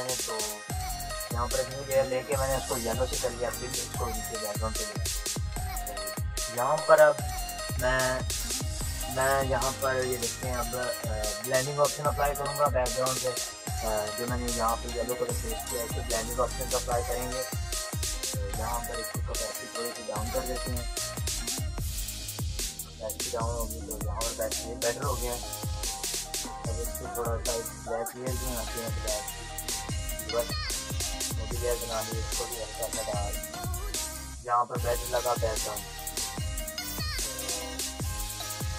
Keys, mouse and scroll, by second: 1.8 BackSpace, 2.4 Return, 4.8 click, 7.4 click, 18.8 click, 23.9 ctrl+=, 25.0 click, 25.1 click, 30.4 shift+BackSpace, 30.6 Return, 31.8 click, 32.0 Down.